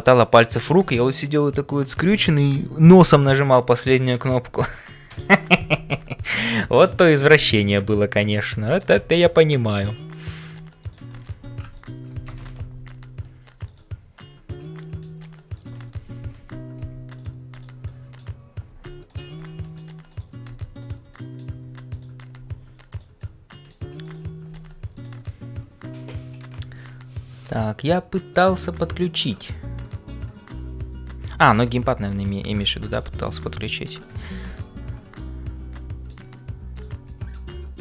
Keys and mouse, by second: 0.0-37.8 typing, 6.4 shift+middle click, 7.0 middle click, 8.7 alt+click, 9.3-10.4 middle drag, 11.7 shift+click, 14.5 middle click, 15.5 click, 18.0 middle click, 19.3 middle click, 21.1 middle click, 21.9 click, 23.3 middle click, 24.1 click, 31.5 middle click, 33.3 middle click, 34.2 middle click, 34.6-36.0 middle drag, 36.7 click, 37.2 middle click.